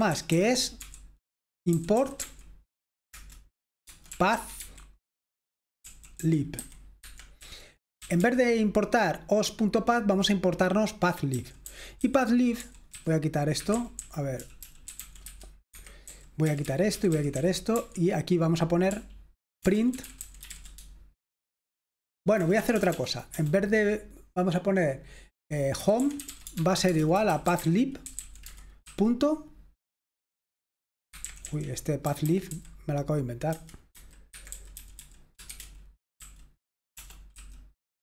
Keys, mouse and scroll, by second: 0.0-0.3 typing, 2.2 typing, 3.1 Return, 3.8-4.6 typing, 5.8-8.2 typing, 11.3-20.5 typing, 22.4-23.4 typing, 25.6-29.3 typing, 31.0-33.5 typing, 35.9-37.3 typing.